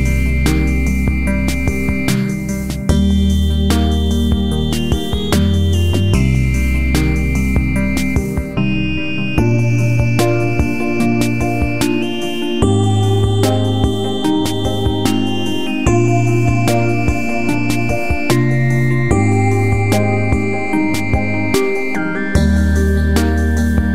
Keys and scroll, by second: 0.3 ctrl+j, 17.8 ctrl+j, 21.7 ctrl+c, 21.9 ctrl+f.